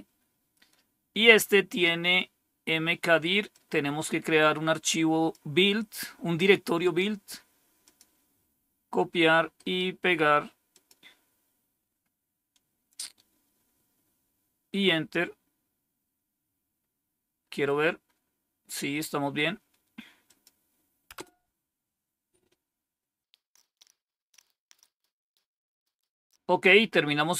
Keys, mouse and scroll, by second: 0.0-1.5 typing, 1.0-2.3 scroll down 1, 3.4-5.2 drag, 6.7 right click, 7.8 click, 9.2-11.3 typing, 9.5 right click, 10.3 right click, 10.6 click, 18.7 scroll down 1, 20.2 click, 21.1 Return, 26.9-27.3 scroll down 1.